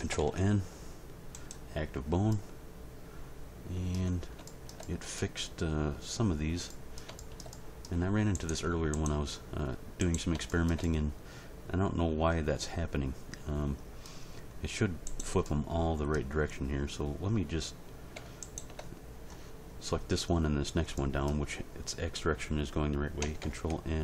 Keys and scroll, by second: 0.1 ctrl+n, 23.4 ctrl+n.